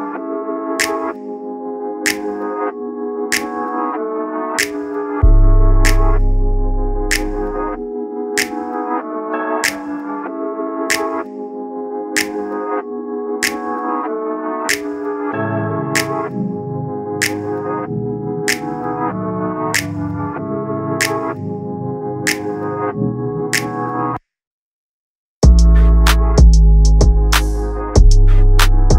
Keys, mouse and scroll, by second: 0.6-2.3 drag, 2.8 click, 3.5 click, 4.9 click, 5.7-6.1 scroll up 2, 7.0 click, 9.7 click, 9.9 scroll down 1, 10.4 click, 10.9-11.4 scroll up 2, 11.4 click, 12.0 click, 12.8 click, 14.1 click, 14.8 click, 15.5 click, 16.3 click, 17.9 click, 19.3 click, 20.9-21.8 drag, 22.3-22.8 scroll down 1, 22.8 click, 26.3 click, 26.6 scroll up 2, 27.6-28.1 scroll down 1.